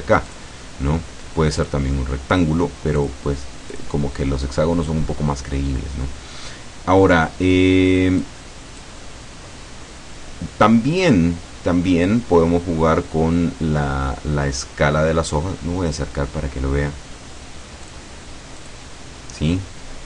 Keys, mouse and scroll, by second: 0.4 click, 1.7 click, 3.0 click, 3.8 click, 4.6-8.3 scroll down 1, 8.3 click, 17.9 click, 18.6 click.